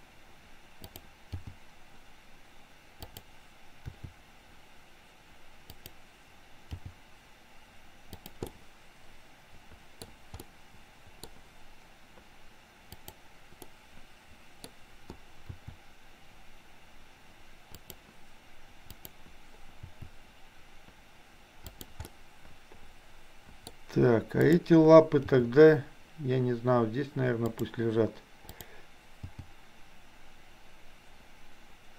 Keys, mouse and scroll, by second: 1.3 g, 3.9 r, 6.8 g, 8.4-10.1 middle drag, 10.4-11.1 scroll up 1, 11.1 scroll up 1, 12.9 click, 13.7 middle click, 15.6 r, 18.9 click, 19.9 r, 22.1-23.7 middle drag, 24.3 click, 25.4 g, 29.3 g.